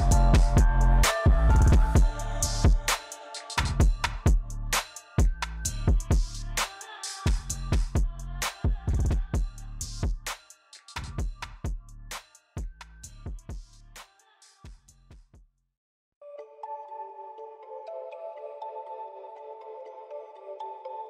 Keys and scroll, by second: 14.4 j.